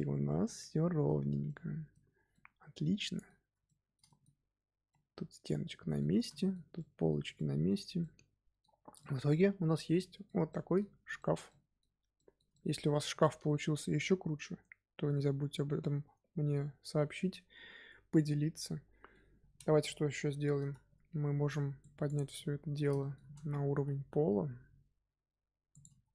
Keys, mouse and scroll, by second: 1.2 scroll down 2, 1.4-2.1 middle drag, 2.1 scroll down 4, 2.2-4.3 middle drag, 4.3-4.8 scroll up 1, 4.8-7.8 middle drag, 7.8 scroll up 1, 7.9-8.7 middle drag, 8.7 scroll down 2, 8.9-15.6 shift+middle drag, 18.2-19.8 middle drag, 19.8 KP_3, 21.4 z, 21.7 click, 22.2 z, 22.7 z, 22.9 shift+middle drag, 23.2-23.6 scroll up 1, 23.6 g, 25.9-26.1 scroll down 1.